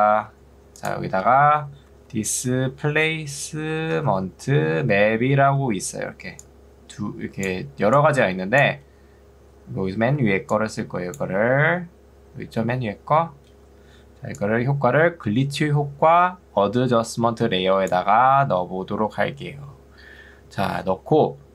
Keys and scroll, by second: 0.3 Escape, 1.3 d, 1.7 i, 3.5-4.4 typing, 5.5 ctrl+2, 10.3 ctrl+2, 13.7 Escape.